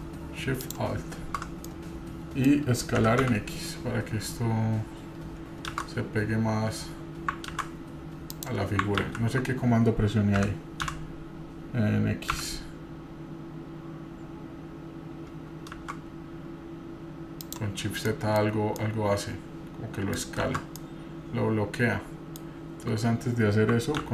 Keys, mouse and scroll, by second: 0.6-1.4 alt+shift+drag, 1.6-2.5 middle drag, 3.1 s, 8.8 scroll down 1, 9.0 ctrl+z, 10.4 s, 17.8-18.2 scroll down 2, 18.1 middle drag, 18.5 scroll up 1, 18.8-20.1 middle drag, 20.4 shift+z, 20.8-22.4 middle drag.